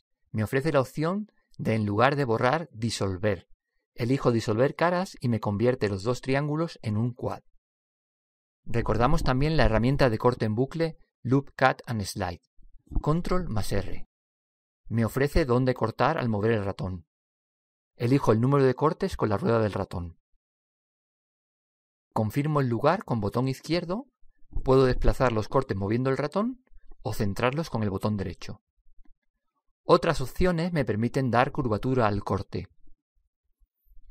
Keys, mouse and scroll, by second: 0.1 x, 6.1-8.0 middle drag, 7.2-11.4 right drag, 9.5 middle click, 10.8 middle click, 10.9 s, 13.1-15.9 middle drag, 15.2 ctrl+r, 29.3-31.3 middle drag, 33.3 click.